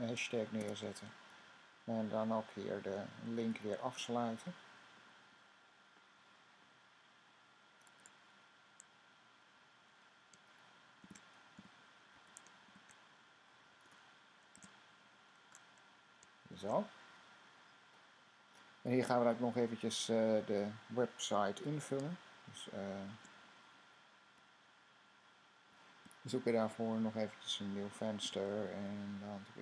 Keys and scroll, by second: 0.0-6.3 typing, 9.4 Left, 10.9-15.4 typing, 16.4 typing, 28.1 super+n.